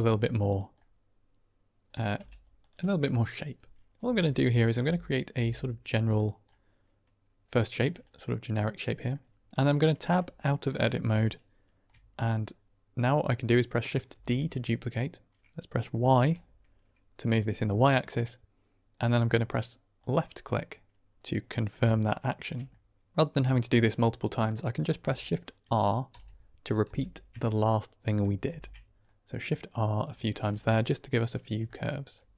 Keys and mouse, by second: 0.4 click, 0.7-1.8 middle drag, 1.8 click, 2.1 g, 2.5 click, 3.9-5.2 typing, 6.0 click, 6.4-7.4 middle drag, 8.0 click, 8.9 click, 9.9 Tab, 10.8 middle drag, 14.0 shift+d, 16.1 y, 19.9 click, 22.0-22.3 shift+drag, 22.6-23.0 drag, 26.0 shift+r, 26.8 shift+r, 27.6-27.9 drag, 28.4 shift+r, 28.9-29.6 middle drag, 30.3 shift+middle click, 30.4 middle drag, 31.6-31.9 shift+drag.